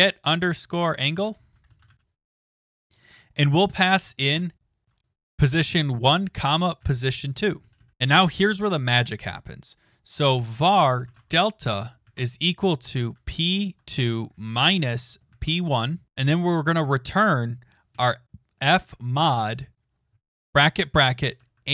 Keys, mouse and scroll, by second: 0.0-7.6 typing, 4.4 click, 7.9 Right, 7.9 Return, 9.8-16.6 typing, 18.1-21.7 typing.